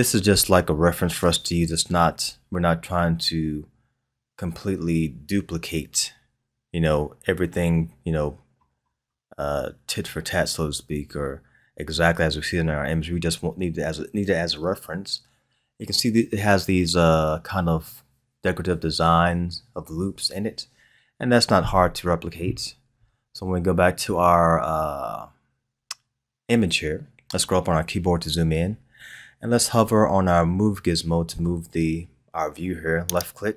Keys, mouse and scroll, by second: 1.0-2.6 scroll down 1, 23.8-26.8 scroll up 1, 27.4-28.3 scroll up 1, 28.3-31.3 scroll up 1, 33.2-33.5 drag.